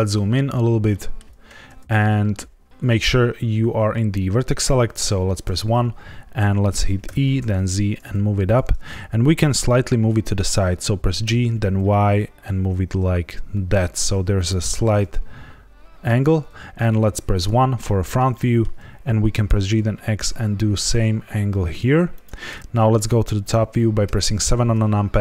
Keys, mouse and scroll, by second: 0.8 shift+middle click, 5.4 1, 7.0 e, 7.3 z, 8.4 click, 11.2 g, 14.3 click, 17.4 KP_1, 18.3 shift+middle click, 19.4 g, 19.6 x, 22.1 click, 22.6 KP_7, 22.6 KP_8, 22.6 KP_1, 24.0 KP_7.